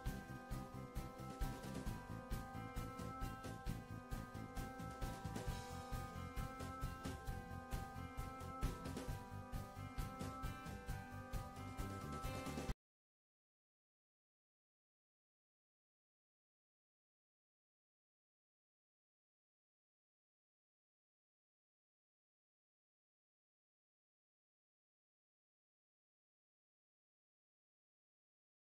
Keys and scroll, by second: 4.5 Down.